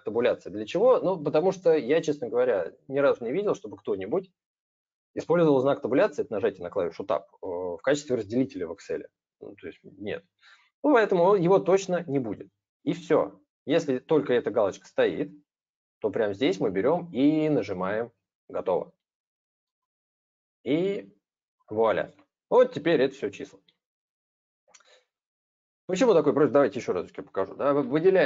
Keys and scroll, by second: 26.8 ctrl+z.